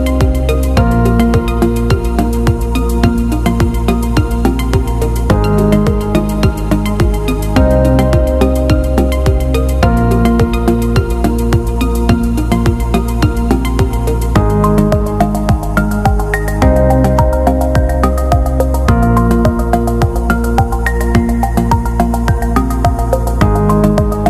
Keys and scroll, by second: 0.9 p, 7.6 Escape.